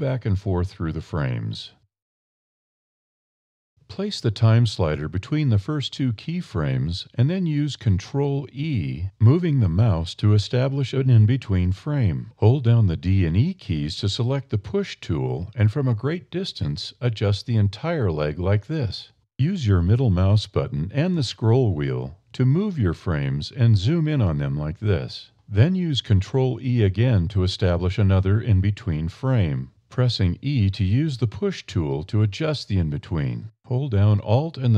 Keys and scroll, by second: 8.1 ctrl+alt+e, 11.8 d, 12.0 e, 13.5 f, 14.4 e, 24.2 ctrl+f, 27.6 e.